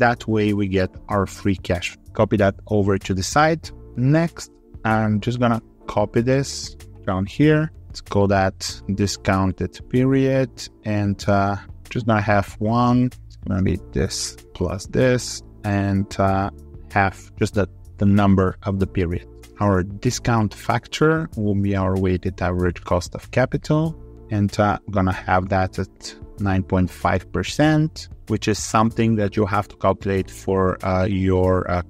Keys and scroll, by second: 1.5 ctrl+r, 6.0 ctrl+c, 7.8 ctrl+v, 16.2 ctrl+r.